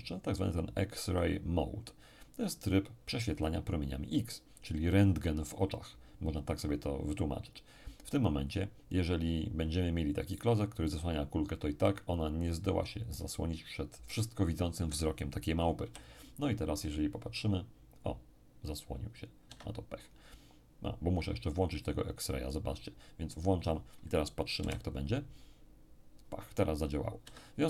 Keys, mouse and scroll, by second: 15.8 p, 19.4 Escape, 23.3 click, 24.6 p, 27.2 Escape.